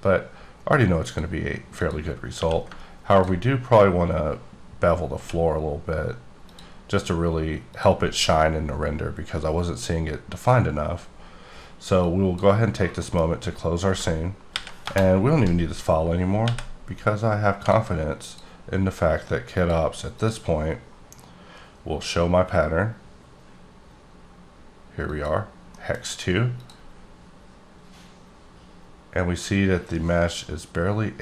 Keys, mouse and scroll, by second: 1.1 click, 1.8 click, 2.4 q, 3.1 ctrl+click, 4.8-5.2 scroll up 3, 5.2 1, 6.5 click, 7.7 click, 12.0 click, 13.0 middle click, 13.2-14.0 scroll down 5, 14.5 ctrl+n, 14.8 Return, 15.5-16.4 scroll up 4, 16.4 n, 17.5 click, 18.2 click, 19.5 click, 20.2 click, 25.0 click, 25.7 middle click, 26.5 click.